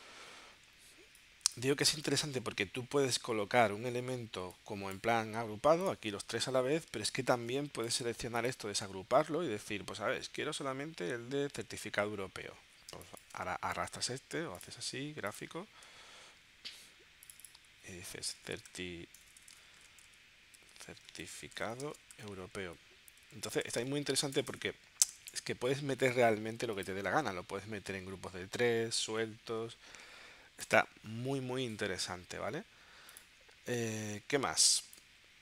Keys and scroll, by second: 7.3 shift+super+g, 13.0 space, 17.9-25.2 typing, 25.3 Return, 33.6 space.